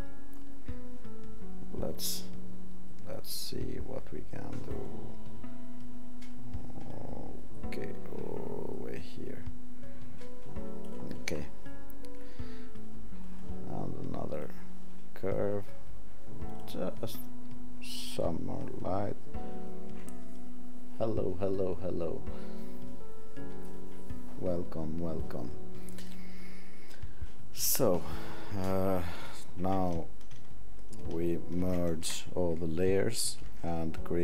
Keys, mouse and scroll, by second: 31.6 ctrl+alt+shift+e.